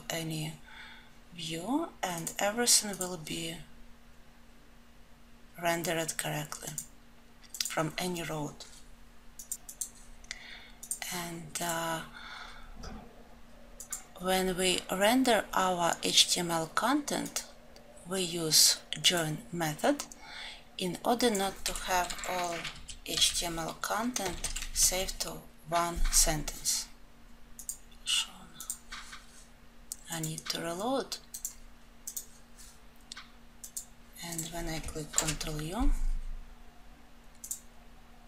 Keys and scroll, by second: 24.4 alt+F12, 28.0 alt+F12.